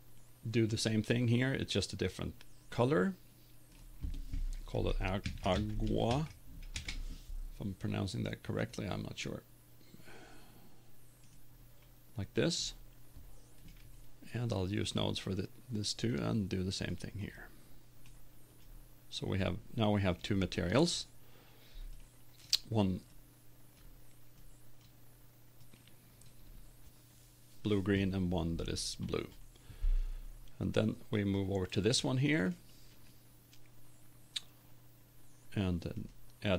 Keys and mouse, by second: 4.2-6.8 drag, 31.2 right click.